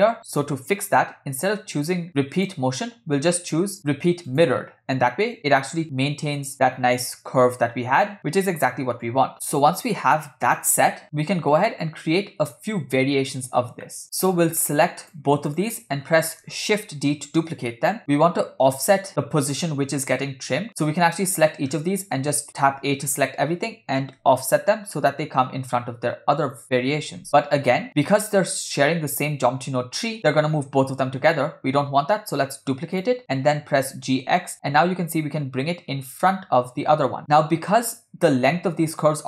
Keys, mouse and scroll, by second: 2.4-4.5 drag, 9.1 click, 9.3 space, 10.6 space, 11.7-12.6 middle drag, 13.5-13.8 scroll down 2, 13.8 middle click, 14.0-14.4 scroll up 4, 15.5 shift+click, 17.1 shift+d, 21.0 click, 22.0-22.6 scroll down 2, 23.1 a, 24.2 g, 33.0 click, 33.8 g, 37.7-38.0 scroll up 2, 38.3 shift+middle click.